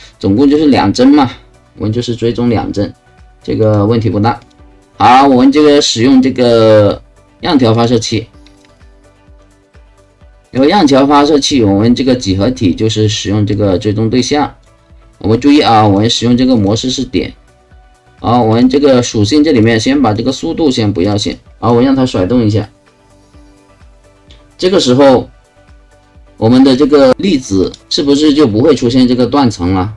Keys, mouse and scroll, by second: 0.5 click, 3.6 click, 4.4 click, 7.7 click, 8.7 click, 9.1 ctrl+click, 9.9 ctrl+click, 10.5 ctrl+click, 13.5-14.6 drag, 15.8 click, 16.6 click, 18.5 click, 19.5 click, 20.1 click, 21.2 click, 21.5 KP_0, 21.6 click, 26.7 click, 27.6 click, 27.8 click, 28.4-29.9 drag.